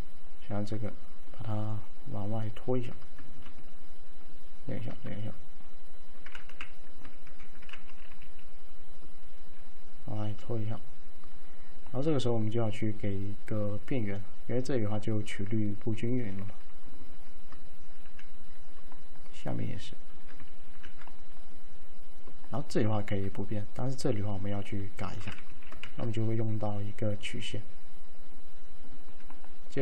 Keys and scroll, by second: 5.1 v, 6.5-8.2 typing, 18.1 x, 20.8 x, 25.6 1, 26.0 ctrl+a.